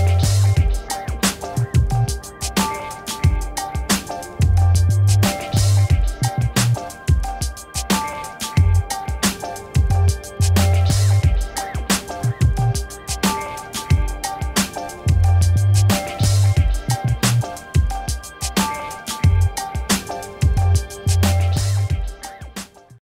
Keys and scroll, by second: 2.1 f, 5.8 Return.